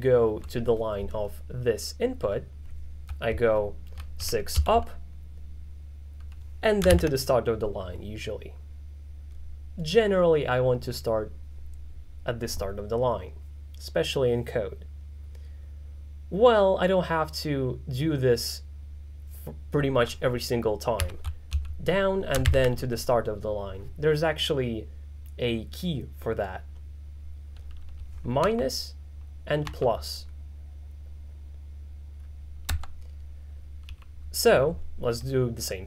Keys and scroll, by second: 4.3 6, 4.6 k, 7.0 shift+6, 21.1 6, 21.5 j, 22.5 shift+6, 28.5 -, 29.7 =, 33.9 j.